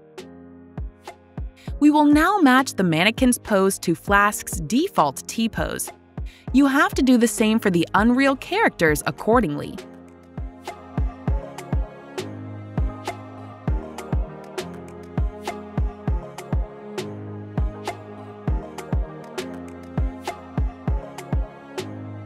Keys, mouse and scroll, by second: 3.2 click, 3.2 typing, 6.0 click, 7.5 click, 11.0 right click, 11.0 a, 12.9 right click, 12.9 w, 15.3 click, 18.2 right click, 18.2 d, 20.0 right click, 20.4 typing.